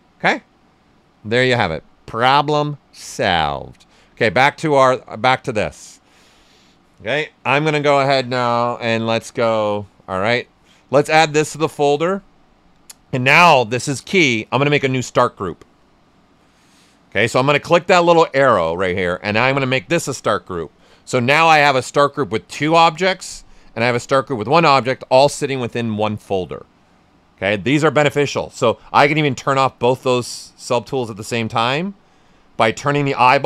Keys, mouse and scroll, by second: 1.6-3.4 drag, 4.2 right click, 4.7 shift+f, 5.2 alt+right click, 7.4 shift+f, 11.1-14.7 drag, 19.6 click, 29.4 click.